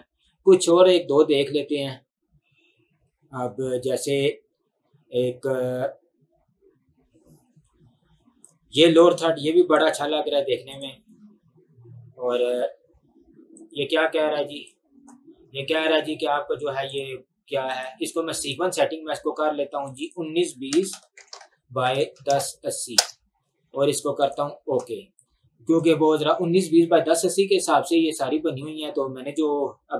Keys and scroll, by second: 20.8-21.9 typing, 21.5 Tab, 23.0 Return.